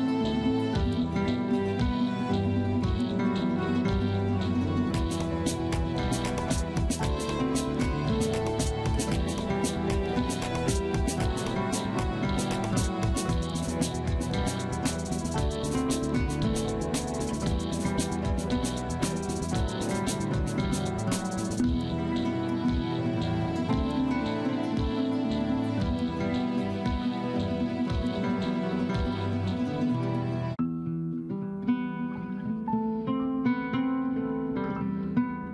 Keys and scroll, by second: 11.1 space, 13.3 F3, 13.5 F2, 15.2 F3, 15.4 F2, 19.8 F2, 23.4 F2, 26.0 F3, 26.2 F2, 32.6 Delete.